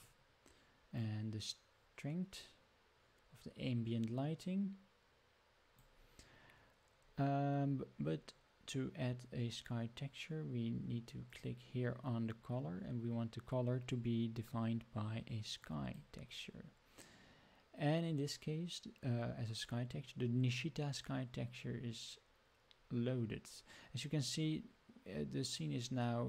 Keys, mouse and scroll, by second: 0.9-5.8 drag, 11.2-15.9 drag.